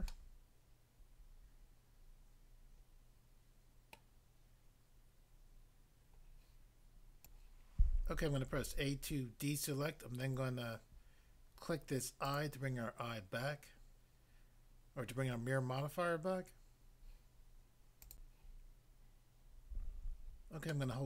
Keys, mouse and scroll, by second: 0.1 middle click, 4.0 middle click, 7.2 click, 8.5 a, 12.3 click, 12.4 click, 18.1 click, 18.3 click, 19.2 click, 20.7 shift+middle click.